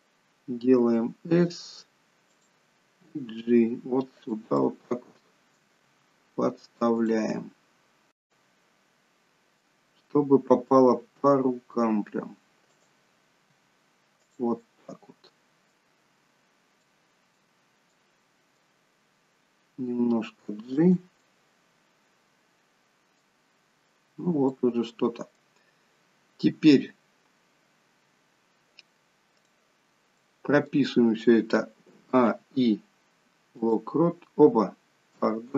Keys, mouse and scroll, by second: 0.9 s, 3.2 g, 4.8 middle click, 5.9 g, 7.4 middle click, 10.9 s, 13.4 g, 14.6 middle click, 16.1 scroll up 3, 16.7 middle click, 17.7 middle click, 19.6 g, 21.1 middle click, 24.6 middle click, 28.2-29.3 scroll down 1, 29.3 click, 30.0 middle click, 31.9 a, 32.1 i.